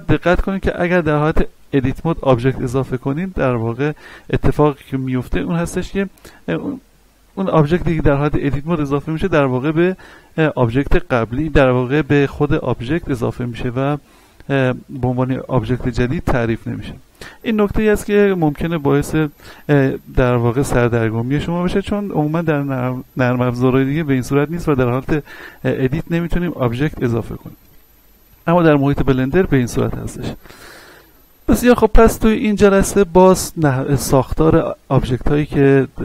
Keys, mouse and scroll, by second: 1.8 Tab, 9.6 Tab, 17.5-18.1 scroll up 1, 19.9-21.3 scroll down 1, 30.5 middle click, 31.5-36.0 shift+middle drag.